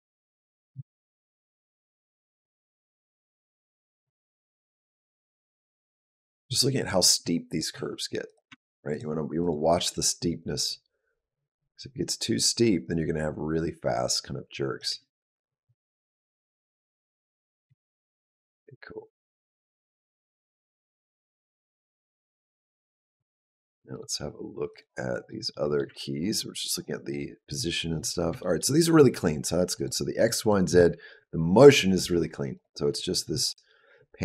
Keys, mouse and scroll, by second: 0.6 shift+middle click, 1.4 click, 1.8 click, 2.3 g, 3.8 s, 4.5 r, 5.9 click, 6.6 click, 7.0 r, 7.6 s, 8.3 r, 9.2 click, 9.5 click, 14.7 space, 17.5 space, 18.3 click, 23.7 click, 24.5 click, 25.3 middle click, 26.2 ctrl+middle click, 27.3 click, 28.2 shift+middle click, 29.6 click, 30.0 click, 30.2 click, 32.4 click.